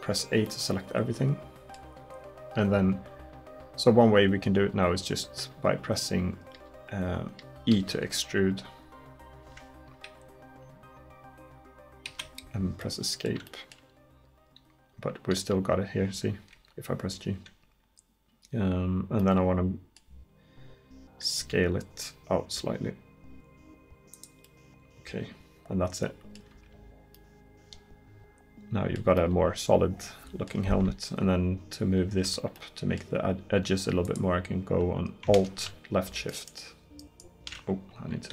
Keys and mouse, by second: 7.8 e, 15.5 g, 21.4 s, 26.4 middle click, 26.6 Tab, 32.3 Tab.